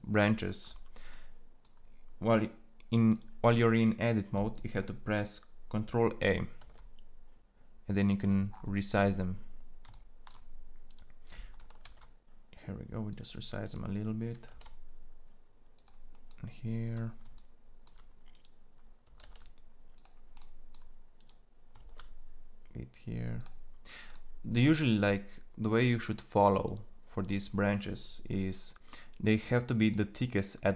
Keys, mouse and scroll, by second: 6.4 ctrl+a, 11.5 ctrl+a, 14.2 ctrl+a, 19.0 ctrl+a, 21.4 ctrl+a.